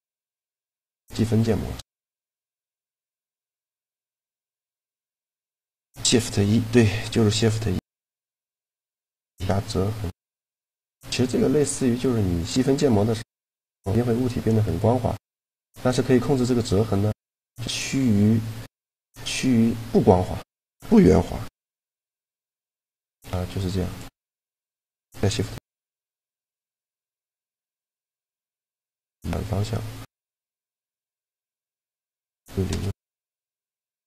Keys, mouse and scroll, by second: 0.4 Tab, 1.7-3.5 drag, 3.5-4.7 middle drag, 7.7-9.6 middle drag, 9.6 Tab, 10.2 Tab, 10.8-14.5 middle drag, 11.5 Tab, 12.3 Tab, 15.1-17.0 right drag, 19.7 Tab, 21.1 ctrl+2, 21.8 ctrl+3, 22.4 Tab, 23.5-25.5 right drag, 25.1 shift+e.